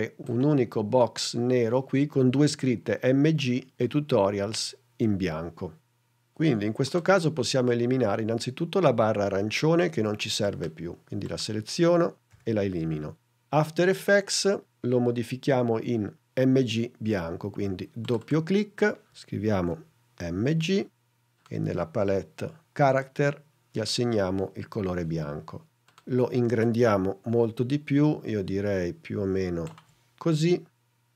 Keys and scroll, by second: 19.6 m, 20.3 g.